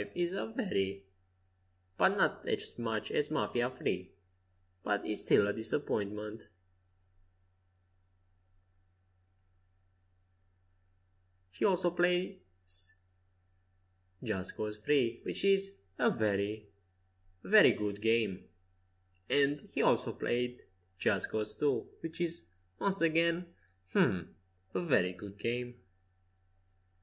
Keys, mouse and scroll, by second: 1.0 g, 4.1 Escape, 4.4 a, 8.5 c, 10.0-12.1 drag, 11.4 g, 15.5 Escape, 15.9 a, 16.9 c, 18.3 g, 22.6 Escape, 23.0 a, 23.8 c, 25.0 g, 26.2 Escape, 26.8 a.